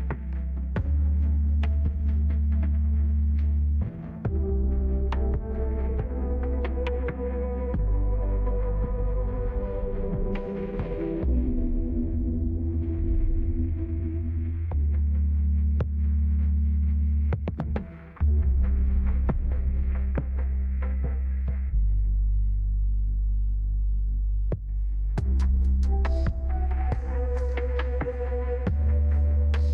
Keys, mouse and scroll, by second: 13.9 click, 16.8-18.3 scroll down 2, 17.5 middle click, 18.1 right click, 26.3 click, 26.5 click, 29.0 click, 29.1 middle click, 29.1-29.7 scroll down 4, 29.2 click, 29.3 middle click, 29.3 click, 29.5 middle click.